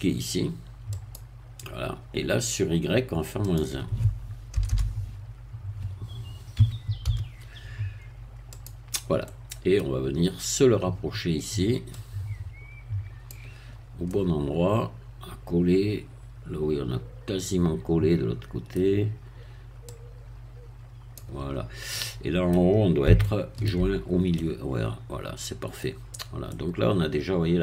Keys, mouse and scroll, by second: 1.0 click, 3.4-4.5 drag, 4.5 BackSpace, 6.6 -, 7.0 1, 8.5 click, 9.2 middle click, 10.1-10.8 scroll up 1, 10.8 scroll up 1, 12.0-13.4 drag, 13.7-14.0 scroll up 2, 14.0-18.9 middle drag, 19.9-21.6 drag, 21.6-21.9 scroll down 2, 21.9 middle click, 22.8 scroll down 2, 23.2 shift+middle click, 24.0-24.4 shift+scroll up 2, 24.4-26.0 middle drag, 26.1-26.4 scroll down 2, 26.4-27.6 middle drag.